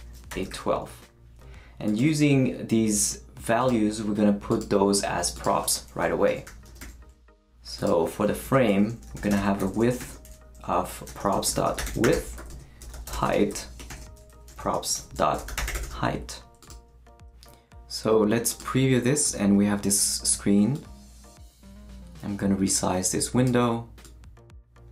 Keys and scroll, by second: 0.0-1.0 typing, 6.0-7.3 typing, 8.3 Left, 8.4-16.3 typing.